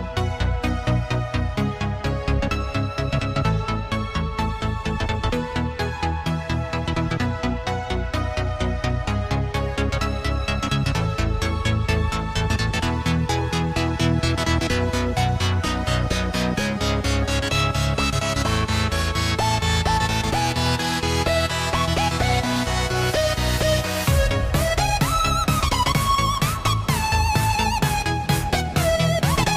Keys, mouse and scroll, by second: 5.0 a, 7.3 Delete, 9.0-11.7 drag, 11.7 s, 15.7-17.9 drag, 19.4 click, 21.2 click, 23.3-26.2 drag, 28.6-29.5 drag.